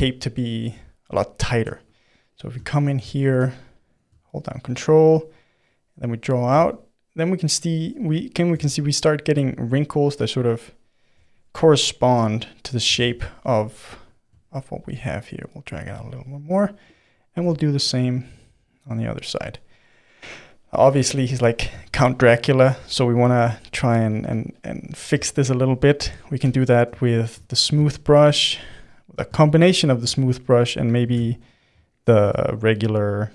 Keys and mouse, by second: 3.3 f, 4.8-6.6 ctrl+drag, 6.6-8.6 middle drag, 8.6 ctrl+z, 9.0-11.2 ctrl+drag, 11.2-12.9 middle drag, 12.9 ctrl+z, 13.2 middle click, 13.5 f, 14.5-16.0 ctrl+drag, 16.0-17.9 middle drag, 17.9-19.5 ctrl+drag, 19.5-24.2 middle drag, 24.2 f, 25.0-26.4 shift+middle drag, 26.4 g, 26.7-27.9 middle drag, 27.9-31.1 shift+drag, 31.1 shift+s, 32.1 shift+f.